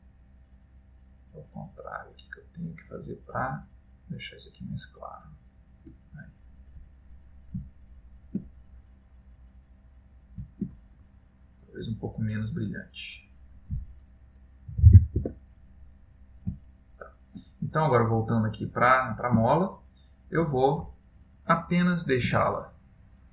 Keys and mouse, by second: 1.2 click, 1.8 click, 5.3 click, 6.6 middle click, 7.9 ctrl+middle click, 8.6 middle click, 12.0 click, 16.7 ctrl+middle click, 18.4 click, 18.9 middle click, 19.6 ctrl+middle click, 21.8 middle click, 22.5 ctrl+middle click.